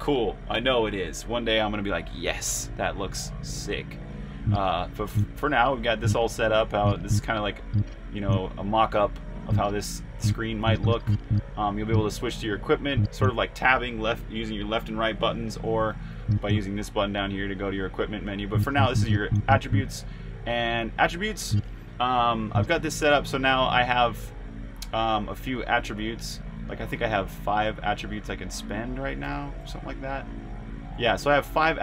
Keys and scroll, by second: 4.3-5.0 typing, 6.9-10.6 typing, 11.7-13.2 typing, 18.8-19.5 typing, 21.2-22.4 typing, 26.9 super+Tab, 29.0-31.8 typing.